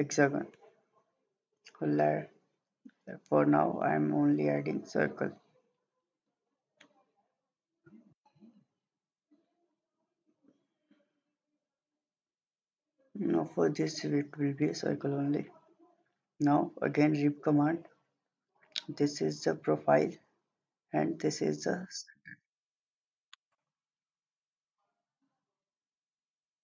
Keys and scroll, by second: 1.6 Escape.